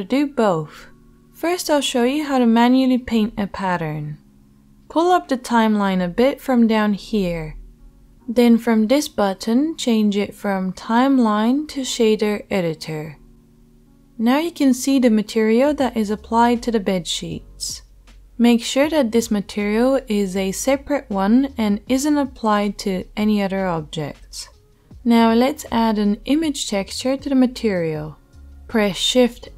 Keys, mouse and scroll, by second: 11.7-29.5 drag, 13.0 Tab, 28.5 shift+a.